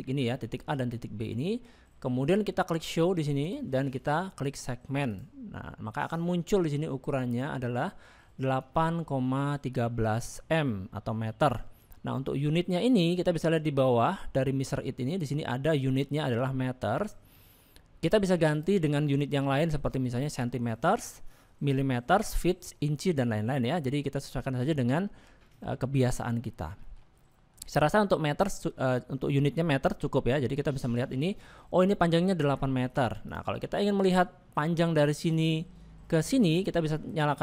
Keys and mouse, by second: 5.1 click, 7.9 middle click, 8.7 shift+middle click, 14.0-15.2 drag, 18.5-24.3 drag, 25.8 shift+middle click, 26.8 shift+middle click, 27.2 middle click, 30.6 middle click, 31.4 shift+middle click, 33.2 click, 33.7 shift+middle click, 34.1 middle click.